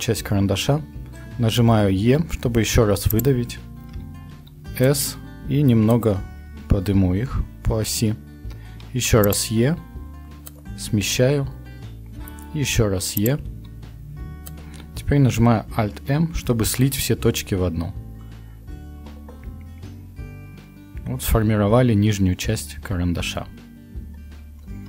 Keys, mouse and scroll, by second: 2.0 e, 4.3 s, 8.7 e, 9.6 s, 12.7 e, 13.5 s, 16.6 alt+m.